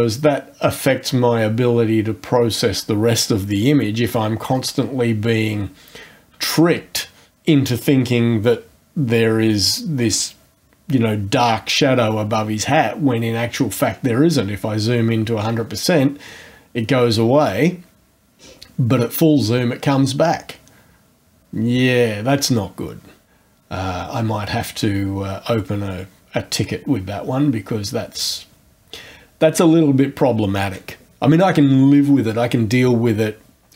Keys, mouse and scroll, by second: 3.9-4.8 scroll down 4, 13.4-14.2 scroll up 4, 18.4-18.8 scroll down 2.